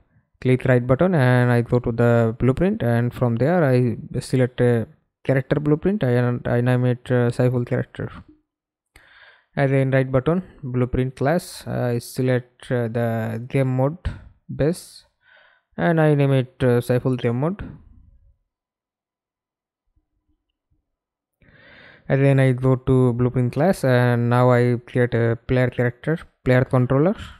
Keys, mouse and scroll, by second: 2.7-7.3 typing, 7.4 Return, 8.6 right click, 14.9-21.0 typing, 21.8 right click, 25.9-27.3 typing.